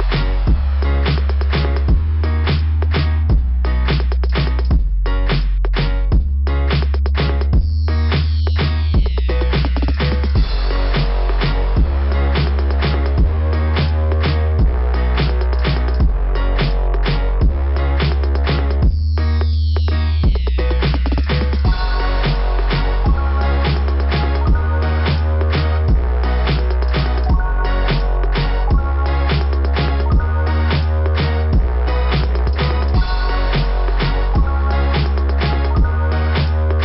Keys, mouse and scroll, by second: 0.8 click, 1.1 click, 1.3 click, 3.8 scroll down 1, 4.6 scroll down 1, 6.8 click, 12.2 scroll down 2, 13.6 click, 16.0 click, 17.7 click, 22.2-22.6 scroll up 4, 23.0-23.7 scroll up 6, 25.0-25.4 scroll up 3, 26.0 scroll up 1, 27.1 scroll up 1, 27.1-27.7 scroll down 2, 28.0-28.4 scroll up 2, 28.9 scroll down 1, 29.5 scroll down 1, 32.3 click, 35.0 click.